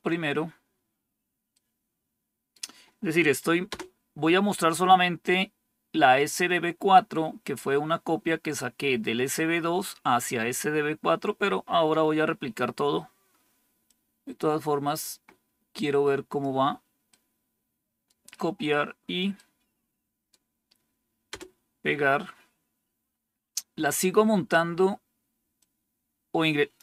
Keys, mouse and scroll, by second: 1.4-2.4 right drag, 3.6 Return, 12.1-13.8 scroll down 2, 13.8-16.4 drag, 17.0 right click, 19.3 right click, 21.2 Return, 22.9 scroll down 1, 23.6-25.5 scroll down 1, 25.5-26.7 drag.